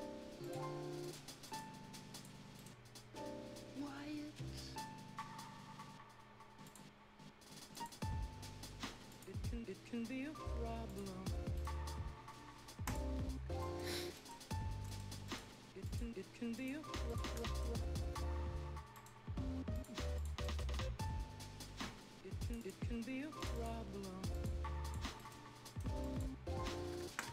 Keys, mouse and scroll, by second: 0.4 click, 2.3 scroll down 1, 2.5 right click, 2.8-3.2 scroll up 1, 7.0 scroll up 1, 7.7 click, 9.1 click, 11.1-11.5 scroll down 1, 11.5 right click, 11.8 scroll up 1, 12.8 click, 13.2 scroll down 1, 13.4-14.1 scroll up 2, 13.6 right click, 14.1 right click, 14.3 scroll down 1, 14.7 scroll up 1, 14.8 right click, 15.2 click, 17.3 shift+scroll down 1, 17.4 right click, 19.7 click, 20.4 right click, 22.4 click, 25.0 scroll down 1, 25.1 right click, 25.4 scroll up 1, 25.6 right click, 25.6 right click, 26.0 click, 26.9 ctrl+scroll down 1, 27.0 Escape, 27.2 scroll up 1, 27.2 Escape.